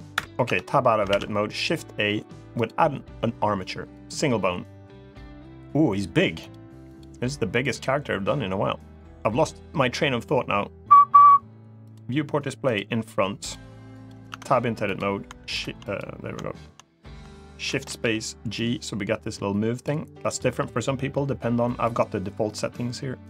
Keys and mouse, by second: 0.2 Tab, 0.8 shift+a, 6.2-11.7 drag, 12.4 click, 13.6 click, 14.0 Tab, 14.6 click, 15.7 click, 17.4 shift+space, 18.3-19.6 drag, 20.0 click, 21.6-23.2 drag.